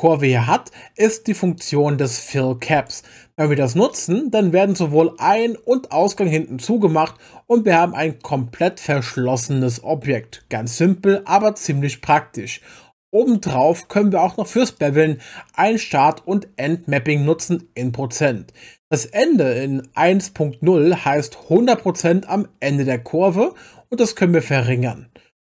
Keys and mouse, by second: 2.8 click, 4.0 middle click, 5.3-8.4 middle drag, 14.8 click, 21.4-25.5 drag.